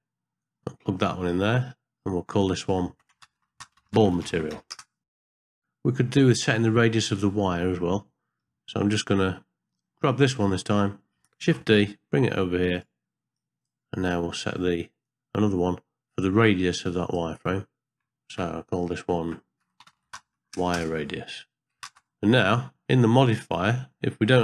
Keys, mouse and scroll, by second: 0.4 click, 0.5 click, 2.4 click, 2.6-4.8 drag, 3.5 l, 5.3 middle click, 5.5 middle click, 6.7 middle click, 7.7 middle click, 10.1 click, 10.6 click, 11.4 shift+d, 13.4 click, 15.0-17.1 drag, 18.0-20.8 drag, 22.0 ctrl+space.